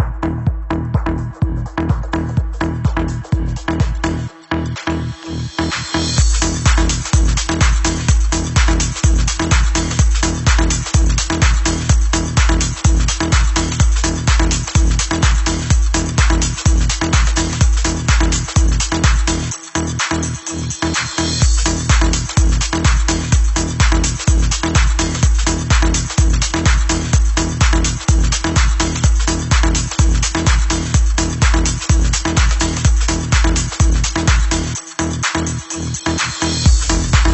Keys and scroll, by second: 0.0-0.3 typing, 1.4 t, 2.2 Return, 4.8 ctrl+t, 7.1 h, 10.1 super+=, 13.9 super+Escape, 28.9 Up.